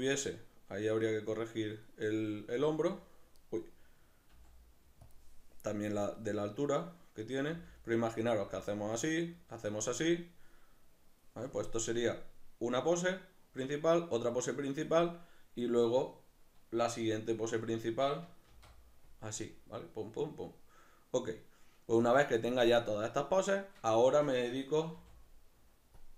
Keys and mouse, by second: 1.8 click, 2.7 r, 3.5 right click, 4.3 g, 5.1 click, 6.8 right click, 7.5 r, 9.9 click, 15.9 right click, 18.5 shift+d, 19.2 click, 21.9-23.6 drag, 23.6 right click, 24.0 shift+right click, 24.9 g, 26.1 click.